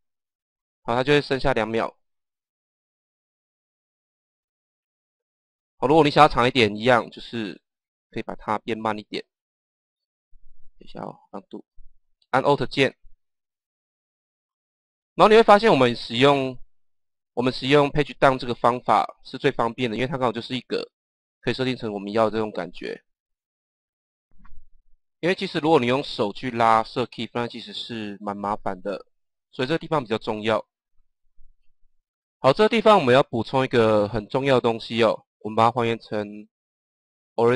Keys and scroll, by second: 11.2 ctrl+z.